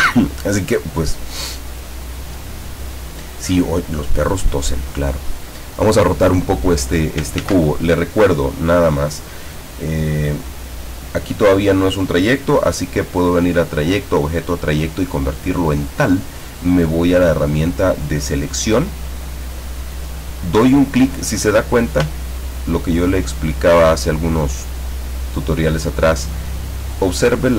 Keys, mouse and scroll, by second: 0.8 click, 1.9 click, 3.7-7.2 drag, 7.5 ctrl+z, 8.6 click, 10.3 click, 13.6 click, 14.2 click, 15.8 click, 22.2-22.6 ctrl+scroll up 2, 22.9 ctrl+scroll up 2, 23.5-24.4 ctrl+scroll down 5.